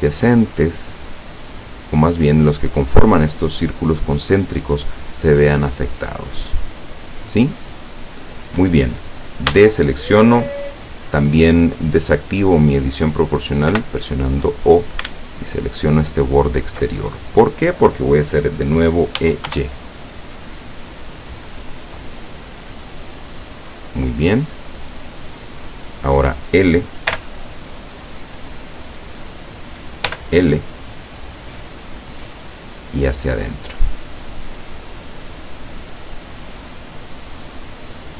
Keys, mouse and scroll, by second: 5.9 click, 7.9 scroll down 1, 9.6 a, 13.8 o, 15.6 alt+shift+right click, 19.2 e, 19.6 y, 23.5 click, 23.9-24.3 scroll down 1, 24.7-26.1 middle drag, 27.2 l, 30.1 l, 31.1-32.6 middle drag, 33.2-35.3 drag, 35.4-36.7 middle drag, 36.9-38.1 middle drag.